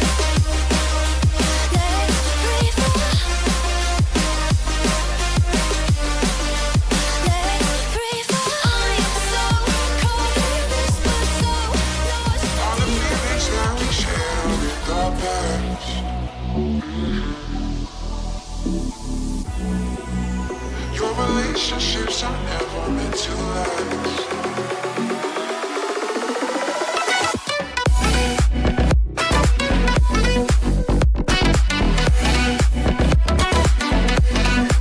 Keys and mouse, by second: 2.1 r, 4.4 r, 6.6 r, 8.3 click, 8.7 g, 11.7 middle click, 11.7-34.8 right drag, 13.1 g, 14.2 g, 17.4 g, 19.2 i, 25.9 click, 29.0 ctrl+z, 29.4 KP_3, 32.4 g.